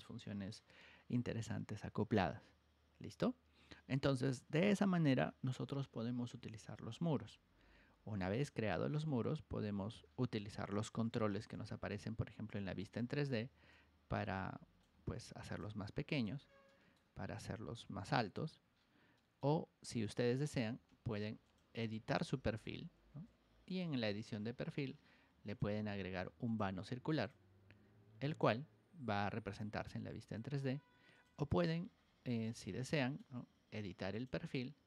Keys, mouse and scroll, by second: 8.5 click, 10.0 middle click, 10.2 middle click, 11.1 ctrl+1, 11.5 click, 11.8 click, 12.9 Escape, 13.6-14.7 drag, 15.4 click, 16.1-18.3 drag, 18.6 scroll down 1, 19.1 middle click, 20.0 click, 21.1 ctrl+1, 21.4 click, 22.0 ctrl+click, 23.6 click, 25.4 click, 26.4 click, 27.1 click, 28.2 click, 29.0 Escape, 29.3 scroll down 2, 29.4 middle click, 31.1 click, 31.6-33.1 shift+middle drag, 34.0 click.